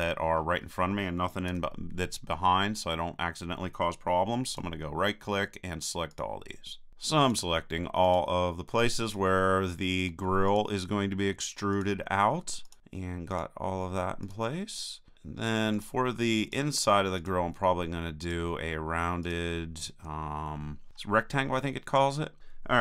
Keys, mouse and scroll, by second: 1.5 a, 4.5-20.9 right drag.